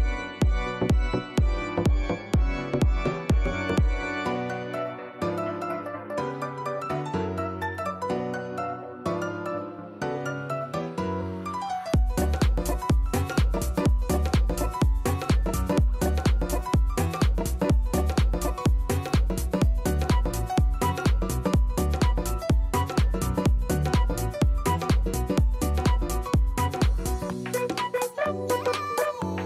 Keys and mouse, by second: 0.2 alt+click, 0.4 ctrl+alt+click, 0.7 ctrl+alt+click, 1.0 ctrl+alt+click, 1.2 alt+click, 1.5 ctrl+alt+click, 1.9 ctrl+alt+click, 2.2 ctrl+alt+click, 2.6 ctrl+alt+click, 4.8 click, 6.8 click, 8.0 click, 11.1 click, 12.8 click, 14.2 Return, 20.4 click, 23.5 click, 24.2 KP_1, 26.3 KP_0, 26.8 KP_1, 28.6 KP_0, 28.7 Return.